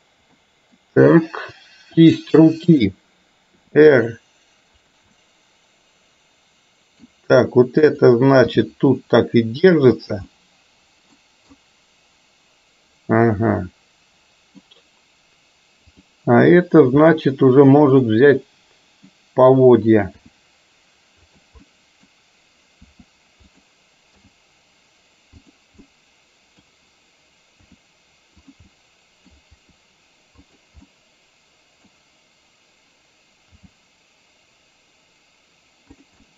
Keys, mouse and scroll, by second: 0.4-0.8 middle drag, 2.0 click, 3.7 r, 5.2-7.2 middle drag, 7.9 click, 8.5 g, 10.4-11.2 middle drag, 11.7-14.7 middle drag, 17.2-19.2 middle drag, 20.3 r, 21.7 middle click, 22.9 r, 24.2 g, 25.9 middle click, 27.7 r, 28.7 middle click, 29.7 r, 30.9-31.9 middle drag, 33.7 g, 36.3 click.